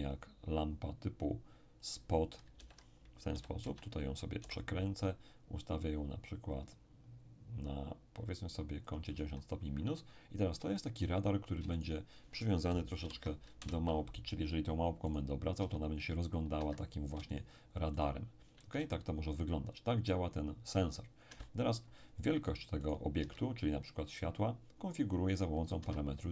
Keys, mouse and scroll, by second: 1.8 click, 2.6 alt+r, 3.3 r, 3.6 x, 4.4 y, 8.9 ctrl+click, 10.1-10.7 ctrl+scroll down 4, 10.7-12.8 shift+middle drag, 11.8 shift+right click, 13.0 ctrl+shift+p, 13.6 Return, 15.1 right click, 15.6 r, 16.6 Escape, 17.3 shift+right click, 18.7 shift+r, 21.3 Escape, 22.8 right click, 23.2 s, 25.8 Escape.